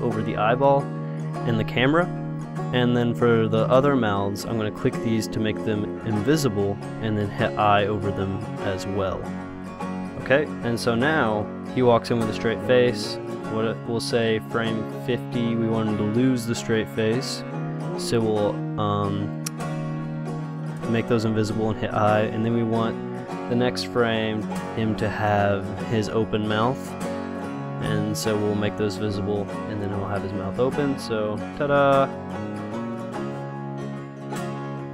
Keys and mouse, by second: 1.7 i, 3.7-8.1 drag, 7.5 i, 8.2 i, 9.0 i, 9.4 i, 11.3 click, 13.0 middle click, 13.1 click, 14.5-18.6 drag, 19.6-22.8 drag, 20.0 i, 21.0 i, 24.5-31.0 drag, 27.7 i, 28.8 i.